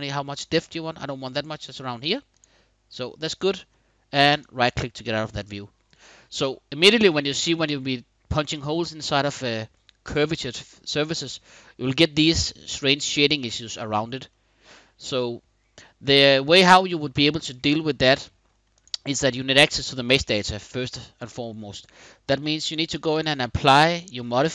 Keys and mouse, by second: 2.1 right click, 2.6-3.3 middle drag, 4.0 click, 5.2-5.9 middle drag, 6.9-8.1 middle drag, 13.9-16.2 middle drag, 17.7-18.2 middle drag, 18.4 click, 20.3 middle click, 22.2-23.0 drag, 23.4 click, 24.2 click.